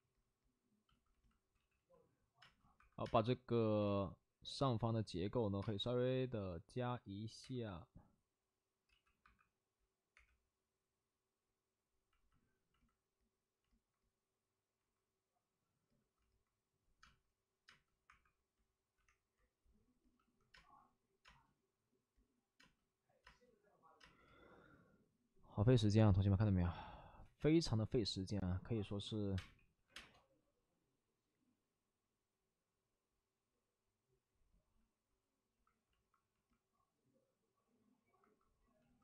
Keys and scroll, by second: 1.4 space, 1.5 ctrl+z, 1.7 ctrl+z, 2.3 space, 2.7 1, 3.0 space, 7.3 space, 7.3 3, 8.8 ctrl+z, 9.8-10.6 typing, 14.6 1, 14.9 3, 16.9-19.4 typing, 20.5 space, 24.2 ctrl+z, 24.2 space, 28.9-29.8 typing, 34.6 space, 35.0 space, 35.1 space.